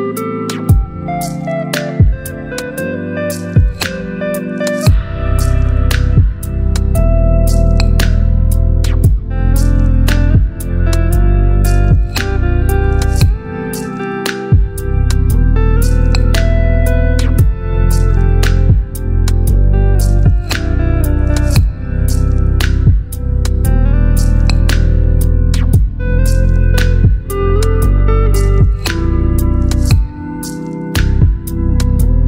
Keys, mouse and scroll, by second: 8.7-12.7 drag, 13.7 ctrl+t, 14.7-15.1 alt+scroll up 3, 17.0-18.0 alt+drag, 18.7-19.4 click, 21.4-22.9 drag, 23.9-25.0 alt+click.